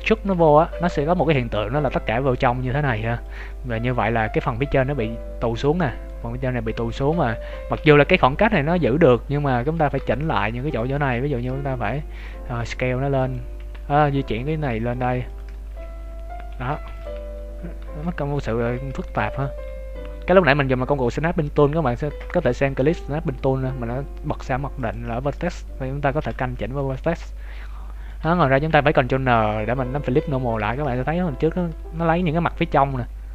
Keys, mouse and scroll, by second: 0.2 ctrl+z, 1.1 s, 3.4 middle click, 3.8 z, 4.3 middle click, 5.8 shift+middle click, 7.1 KP_3, 7.5 KP_1, 7.7 z, 10.0 ctrl+Tab, 10.9 right click, 11.3 b, 13.2 click, 13.6 g, 16.2 scroll up 2, 16.3 Tab, 16.5 scroll down 3, 16.8 ctrl+s, 17.2 z, 18.0 middle click, 18.7 Tab, 19.1 z, 19.4 middle click, 21.2 Tab, 24.7 click, 25.8 Tab, 26.4 shift+middle click, 26.8 middle click, 28.2 a, 28.3 a, 29.2 ctrl+n, 30.0 middle click, 30.7 ctrl+z, 30.9 Tab, 31.5 middle click.